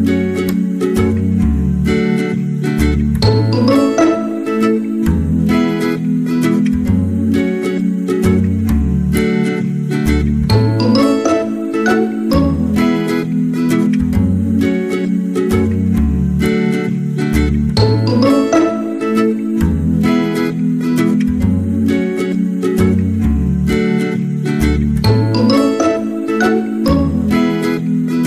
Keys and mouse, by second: 0.3 shift+middle click, 0.8 middle click, 1.8 middle click, 2.5 middle click, 3.1 middle click, 3.9 middle click, 4.4 middle click, 4.8 s, 6.3 middle click, 6.9 s, 8.5 middle click, 9.1 w, 10.7 w, 11.5 middle click, 12.2 middle click, 12.9 middle click, 13.8 middle click, 15.4 f, 15.9 middle click, 17.0 middle click, 22.0 middle click, 23.2 g, 25.1 k.